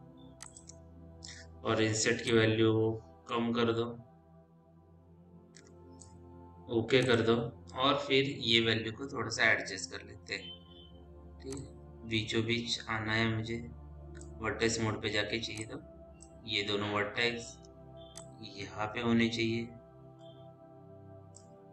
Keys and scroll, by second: 15.1 1.